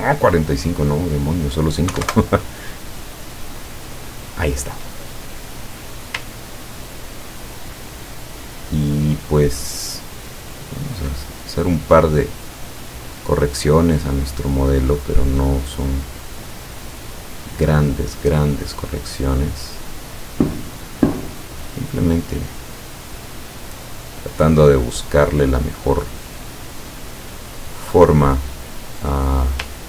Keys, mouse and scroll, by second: 1.1 click, 2.0 KP_5, 2.1 KP_Enter, 3.7 click, 6.6 ctrl+scroll down 2, 7.1 ctrl+scroll down 2, 10.7 ctrl+scroll up 2, 12.3 click, 12.9 click, 14.4-18.8 drag, 20.0 click, 21.5-23.9 drag, 24.6 click, 25.9-27.1 drag, 27.7-29.7 drag.